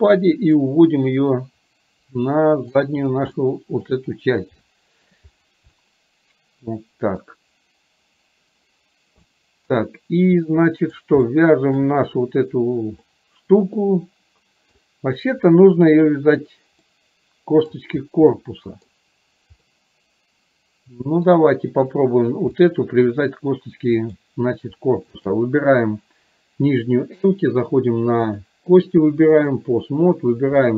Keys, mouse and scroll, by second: 0.8-2.9 drag, 3.4-4.0 shift+middle drag, 4.8 shift+middle click, 5.8-7.4 middle drag, 9.3 scroll up 1, 9.5-11.0 middle drag, 11.3-11.6 shift+scroll up 1, 11.6 shift+middle click, 13.1-14.8 middle drag, 14.8 scroll down 1, 16.9-17.8 scroll up 1, 18.5-19.0 middle drag, 19.8-21.3 scroll up 1, 21.3 scroll down 1, 22.8-23.1 middle drag, 23.1 scroll down 1, 24.3 drag, 25.3 shift+click, 28.4-29.8 drag, 30.6-30.7 middle drag.